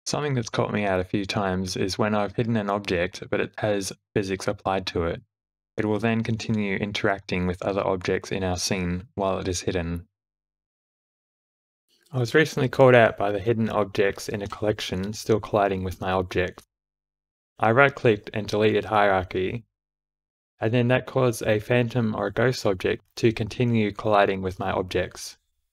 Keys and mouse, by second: 0.9 h, 2.1 space, 6.4 space, 6.7 shift+Left, 7.8 click, 8.3 alt+h, 10.0 s, 11.5 g, 11.9 space, 13.8 space, 14.2 shift+Left, 14.5 click, 15.7 space, 18.4-20.0 right drag, 20.8 click, 21.4 space, 23.9 space, 24.5 ctrl+z, 24.5 x.